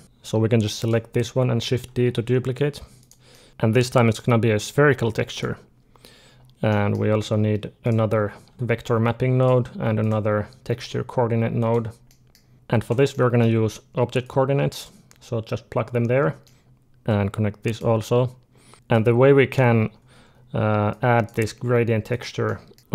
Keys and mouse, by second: 0.0 click, 0.6-2.6 drag, 1.7 shift+d, 3.2 middle click, 3.9-5.9 drag, 6.3-7.7 middle drag, 7.7 click, 8.4 shift+d, 9.9-11.9 drag, 12.1 middle click, 12.7-14.1 middle drag, 14.1-16.1 drag, 16.3 middle click, 16.8-18.7 drag, 18.8-22.8 drag, 21.4 g.